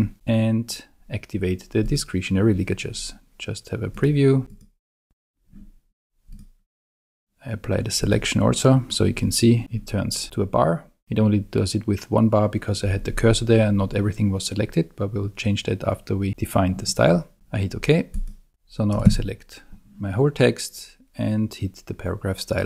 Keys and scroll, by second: 19.0 super+a.